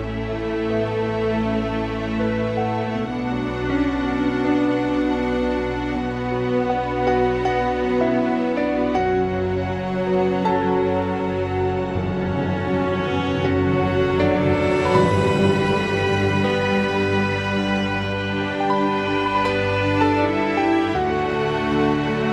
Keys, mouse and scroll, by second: 0.4 e, 1.4 g, 2.2 r, 4.2 r, 5.4 s, 5.9 r, 8.5 r, 9.8-11.9 typing, 12.3 click, 13.1 g, 13.9 click, 14.4 g, 15.4 s, 16.0 g, 17.1 s, 17.5 click, 18.2-19.2 drag, 19.9 click, 20.6 click, 22.2 s.